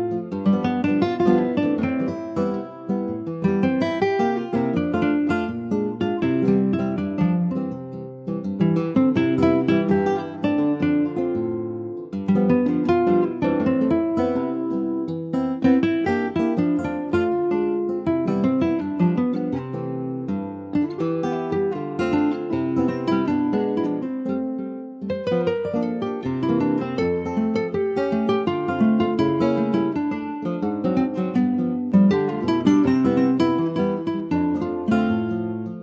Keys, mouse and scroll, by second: 6.2 click, 6.7 middle click, 7.5 click, 7.9-10.9 middle drag, 11.1 scroll down 3, 11.4 middle click, 12.0 click, 12.2 middle click, 12.4 scroll up 2, 12.6 ctrl+s, 13.1 middle click, 13.7 ctrl+s, 13.7 click, 14.7 middle click, 15.2 s, 16.9 ctrl+z, 17.8 click, 18.5 /, 18.8 click, 19.2 middle click, 19.8 ctrl+s, 20.6 /, 21.2-22.4 middle drag, 22.4 click, 22.8-24.0 middle drag, 24.0 ctrl+s, 24.0 click, 24.3 middle click, 25.3 ctrl+s, 25.4 middle click, 26.2 ctrl+s, 26.5 scroll up 1, 26.7 ctrl+s, 27.3 ctrl+s, 28.0 click, 28.4 alt+middle click, 28.9 alt+middle click, 29.4 ctrl+s, 29.8 shift+a, 32.2 ctrl+s, 32.7 alt+middle click, 33.2 alt+middle click, 34.2 s.